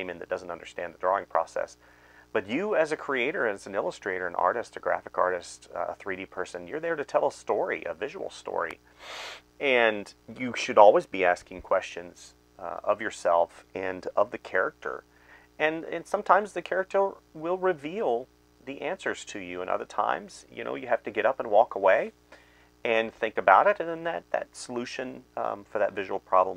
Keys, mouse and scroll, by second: 0.8 space, 1.8 space, 2.2 space, 2.6 space, 3.7-6.1 typing, 7.4 space, 8.3 space, 9.0 space, 10.5-13.7 typing, 14.8-19.3 typing, 17.2 alt+r, 20.3-26.5 typing.